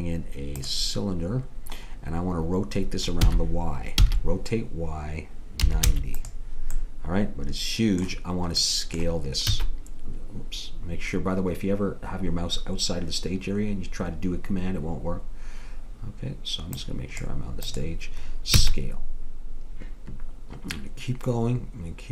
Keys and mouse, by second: 3.2 r, 9.6 s, 16.8-19.7 drag, 18.6 s.